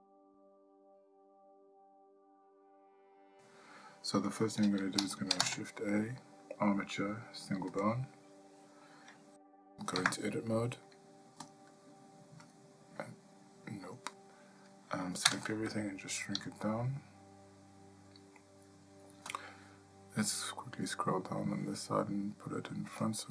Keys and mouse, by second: 0.8-1.1 middle drag, 1.5-1.9 shift+middle drag, 5.4 shift+a, 10.6 Tab, 12.5 click, 13.9 click, 15.3 a, 21.5 click.